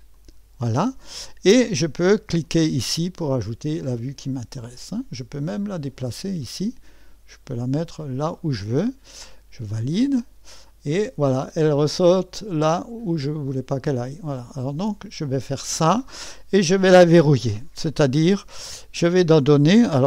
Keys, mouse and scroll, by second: 0.2 click, 2.4 click, 5.5-8.4 drag, 9.7 click, 12.8-15.4 drag.